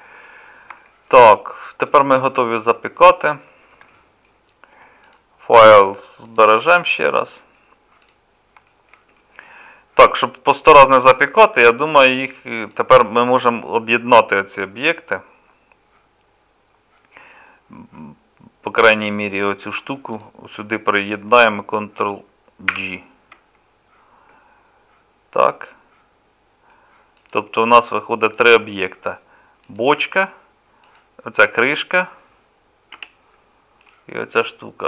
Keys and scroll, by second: 22.7 ctrl+j, 32.9 g.